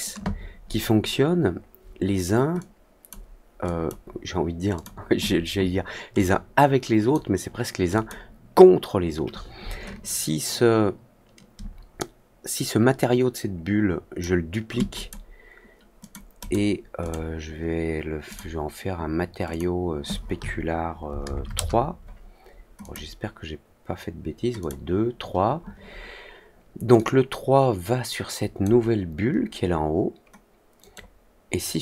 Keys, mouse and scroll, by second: 2.5-3.0 drag, 3.6 drag, 4.7 click, 6.1-7.0 drag, 7.9 click, 10.0-14.1 ctrl+drag, 14.9 click, 15.9 click, 16.3 click, 16.9 click, 18.2 click, 19.4 click, 22.7 click, 24.5 click, 26.9-28.5 drag, 30.7-31.8 drag.